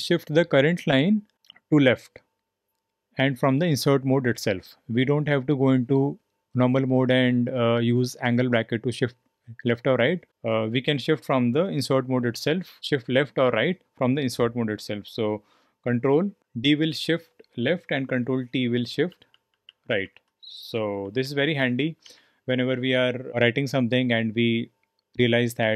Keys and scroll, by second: 16.4 ctrl+d, 18.3 ctrl+t, 18.7 ctrl+t, 19.1 ctrl+t, 20.7 ctrl+d, 21.0 ctrl+d, 21.2 ctrl+d.